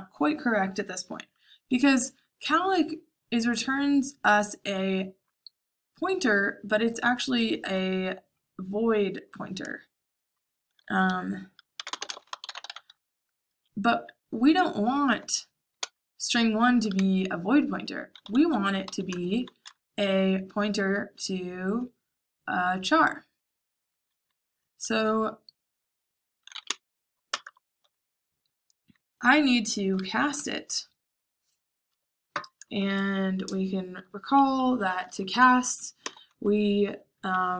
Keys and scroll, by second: 11.5-13.4 typing, 13.4 Escape, 15.7 j, 16.9-19.3 typing, 26.3-27.3 typing, 32.7 shift+0, 34.5 Escape, 34.9 h, 35.2 l, 35.9 i.